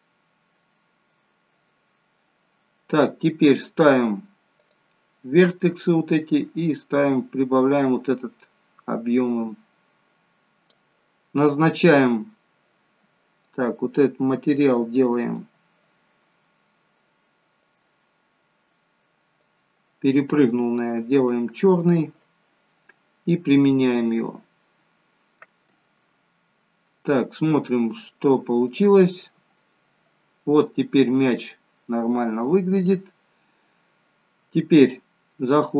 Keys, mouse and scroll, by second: 1.7 scroll up 1, 4.5 click, 15.2 click, 23.5 click, 29.5 click, 32.8 click.